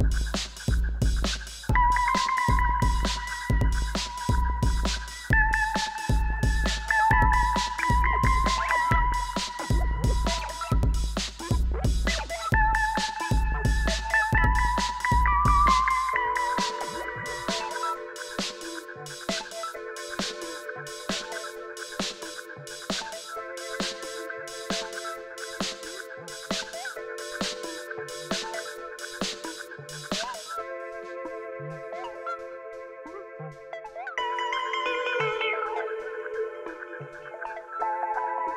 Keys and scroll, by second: 3.5 alt+a, 4.4-5.9 typing, 11.5 shift+a, 12.3 /, 13.0 Tab, 13.4-15.8 typing, 14.1 ctrl+r, 14.5 Return, 18.0-18.9 typing, 18.6 Escape, 19.6 ctrl+r, 20.8 s, 20.9 y, 23.6 o, 23.8 s, 23.8 x, 25.1 a, 25.3 s, 25.4 x, 28.3 s, 28.4 x, 30.5-32.7 typing, 33.7 shift+r, 36.3-38.5 typing.